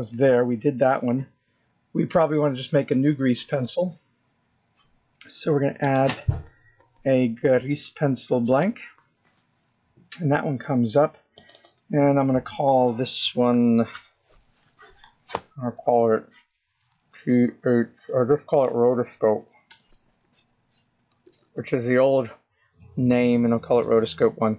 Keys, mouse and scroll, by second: 1.3-2.2 scroll up 3, 7.7 click, 11.7-13.2 scroll down 4, 13.2 click, 13.4 click, 20.1 BackSpace.